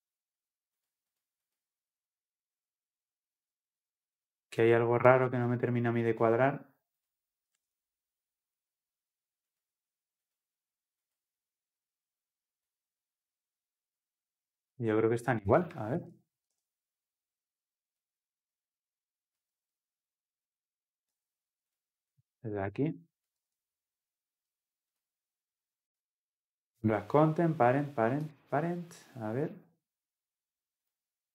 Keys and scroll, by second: 19.8 ctrl+v, 21.2 ctrl+z, 26.1 ctrl+v.